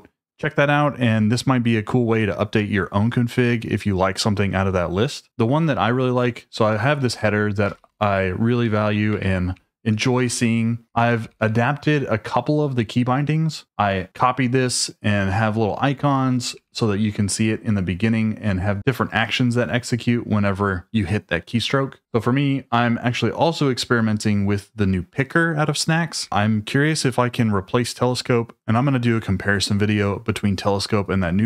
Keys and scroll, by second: 5.9-11.8 typing, 9.1 Escape, 11.8 Escape, 13.6 j, 16.4 k, 22.0 shift+v, 26.2 Escape.